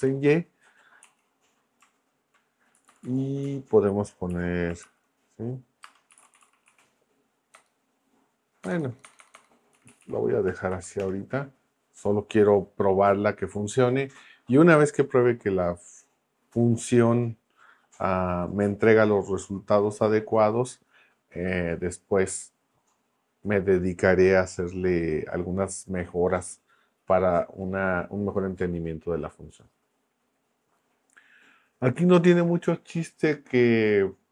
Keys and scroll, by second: 0.0 y, 1.0 Right, 2.7 Left, 3.4 Left, 4.3 Right, 4.8 shift+;, 5.8-7.5 typing, 8.6 BackSpace, 9.7 Right, 10.7 shift+;, 11.0 Return.